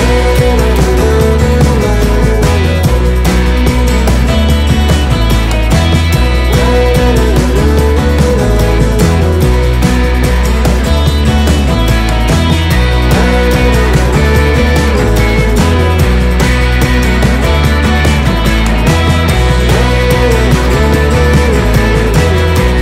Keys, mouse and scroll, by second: 1.5 click, 5.4 KP_Enter, 7.0 Right, 7.8 Up, 8.5 Right, 8.8 Up, 14.1 click.